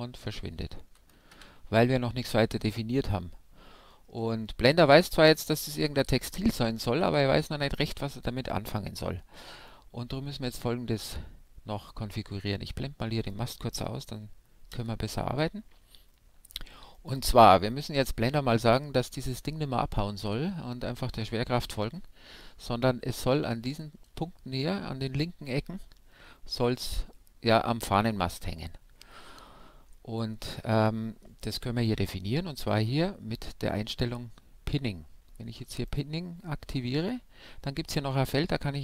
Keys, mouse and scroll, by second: 0.7 alt+a, 1.3 shift+Left, 2.3-13.2 middle drag, 13.2-14.9 right drag, 14.7 h, 16.1-18.2 middle drag, 16.9-18.7 right drag, 29.9-35.8 middle drag, 35.8-37.5 drag.